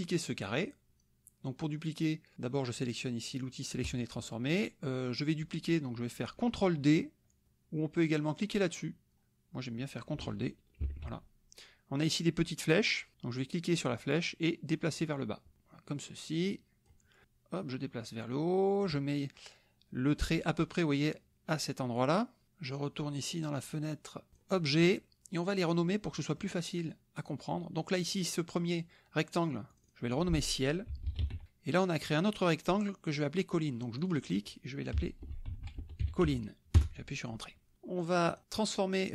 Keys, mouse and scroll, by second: 3.8 click, 10.8 ctrl+d, 14.2-17.1 drag, 17.2-19.0 drag, 24.3 click, 26.1 middle click, 27.2 click, 29.7 click, 30.8-31.7 typing, 32.4 click, 34.0 click, 34.9-36.7 typing, 38.3 click.